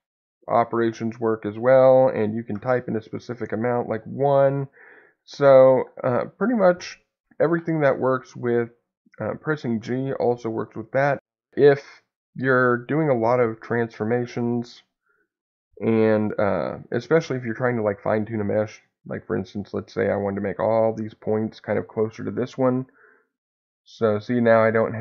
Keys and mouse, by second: 5.5 Escape, 11.5 ctrl+z, 22.8-23.9 drag, 24.5 click.